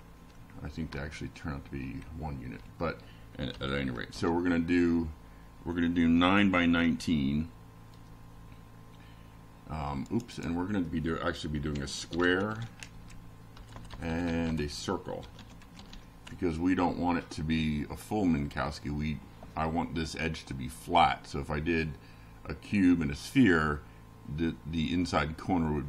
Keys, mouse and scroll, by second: 4.6 click, 5.8-7.8 typing, 8.9-10.5 typing, 20.5 click, 25.2 click.